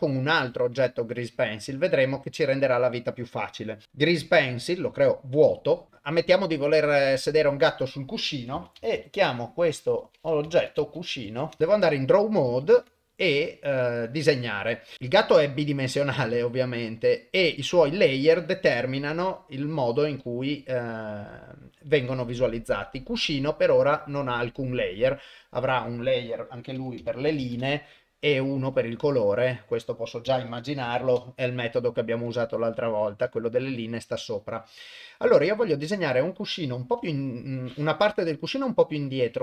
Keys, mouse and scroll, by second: 0.4 shift+Tab, 2.1 shift+a, 7.2 click, 7.4 click, 12.6 ctrl+Tab, 14.9-17.5 middle drag, 18.7 click, 20.5 click, 22.0 click, 25.6-27.6 drag, 27.4 e, 28.7 click, 29.5-32.3 drag, 35.5 middle click, 37.0 KP_7.